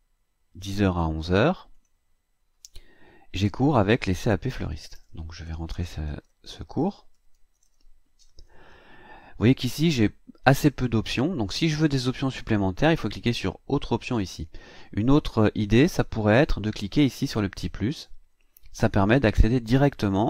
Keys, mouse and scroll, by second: 1.7 click, 4.7-8.1 typing.